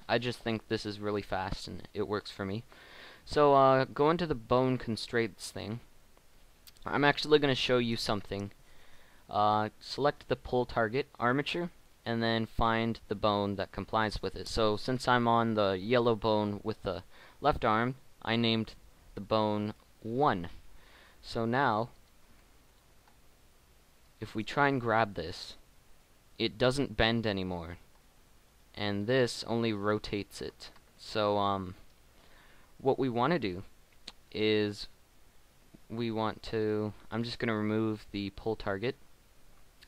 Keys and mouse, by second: 2.8 middle click, 5.4-10.4 middle drag, 14.8-22.0 middle drag, 25.1 g, 27.9 g, 29.2 g, 30.9 ctrl+z, 36.8-39.8 right drag.